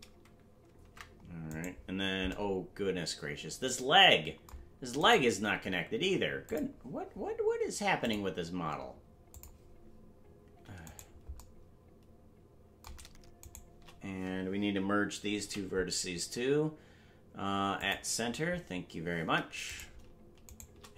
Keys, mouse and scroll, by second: 0.0 right click, 2.3 ctrl+Tab, 5.0 right click, 6.4 click, 8.0 click, 9.3 click, 10.8 right click, 13.4 shift+right click, 15.4 m, 19.8 right click, 20.4 shift+right click.